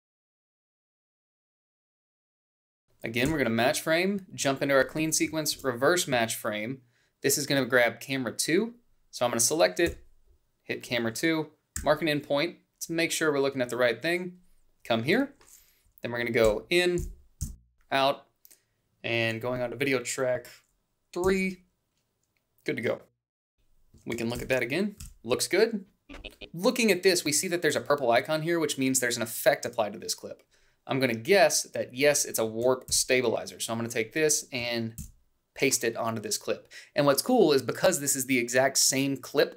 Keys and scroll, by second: 1.1 Up, 2.8 f, 5.1 ctrl+shift+f, 9.5 f, 11.4 i, 16.0 i, 16.6 Down, 17.0 Left, 17.2 o, 20.9 b, 23.3 ctrl+b, 32.6 ctrl+c, 34.7 ctrl+v.